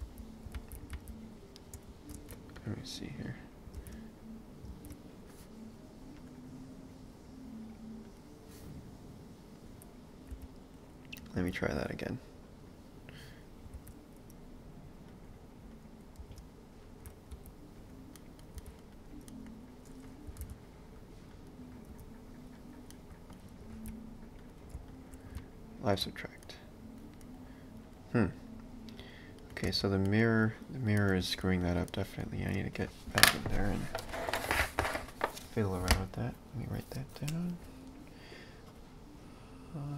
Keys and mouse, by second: 0.1 x, 0.6 ctrl+z, 1.9 ctrl+shift+z, 2.6 click, 3.8 ctrl+space, 6.2 click, 10.4 x, 11.4 shift+a, 12.5 click, 13.8 shift+a, 16.2 space, 17.3 s, 18.2 middle click, 18.6 s, 19.3 middle click, 20.3 r, 21.9 s, 22.9 middle click, 23.7 ctrl+a, 24.9 shift+click, 25.4 ctrl+b, 26.4 middle click, 27.9 click, 29.4 middle click, 29.7 ctrl+space, 30.1 middle click, 30.4 click, 31.0 middle click, 31.2 space, 31.9 middle click, 32.4 ctrl+space.